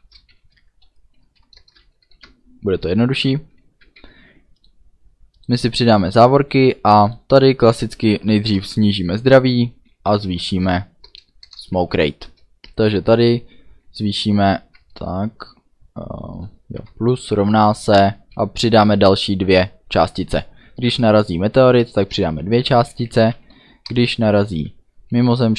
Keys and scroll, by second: 0.0 space, 0.3 shift+[, 0.8 Delete, 1.2 Down, 1.5 Return, 2.0 shift+], 3.8 ctrl+s, 8.4 Return, 9.8-11.2 typing, 11.4 Return, 12.2 space, 12.8 =, 13.1 space, 14.7 BackSpace, 16.7 KP_Add, 17.2 =, 17.4 space, 18.8 2, 19.5 ;, 22.1 Return, 22.8-25.1 typing.